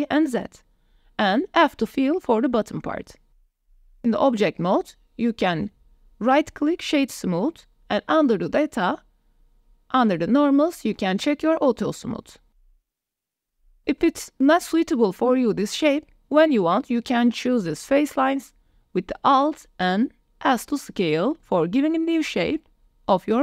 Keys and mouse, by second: 1.3 middle click, 2.2 f, 2.6 middle click, 3.7 click, 4.7 Tab, 4.9 middle click, 5.4 shift+drag, 5.9 click, 6.3 click, 9.1 click, 11.6 click, 12.7 click, 13.5-14.3 middle drag, 14.9 shift+middle drag, 15.3-15.6 middle drag, 15.9 click, 16.5 Tab, 17.3 3, 18.8 alt+click, 19.5 click, 20.7 s.